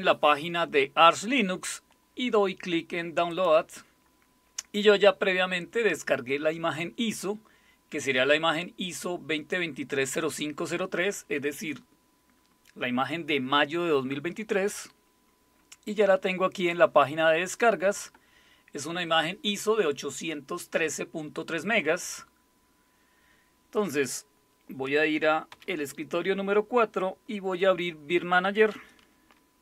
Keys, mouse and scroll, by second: 3.3 click, 16.5-25.5 drag, 25.5 super+4.